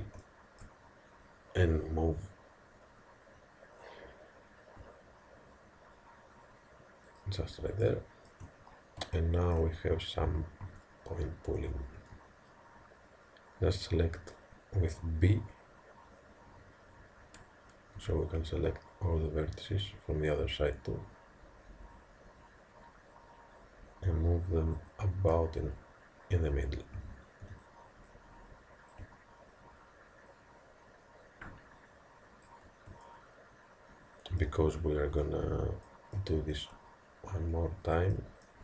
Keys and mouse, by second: 0.3-5.2 middle drag, 1.7 g, 7.9-10.9 middle drag, 10.7 a, 12.0 b, 18.0 g, 27.0 a, 27.5 b, 29.0 click, 33.1-38.6 middle drag.